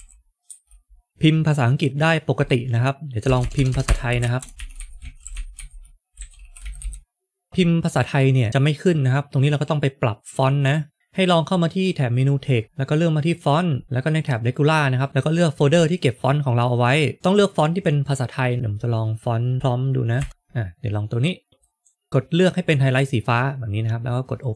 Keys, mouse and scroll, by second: 0.0-0.4 typing, 3.2 BackSpace, 3.3 BackSpace, 5.2-7.1 typing, 12.0 click, 12.6-13.2 scroll down 2, 13.3 scroll down 1, 13.3 click, 14.9 click, 17.1 click.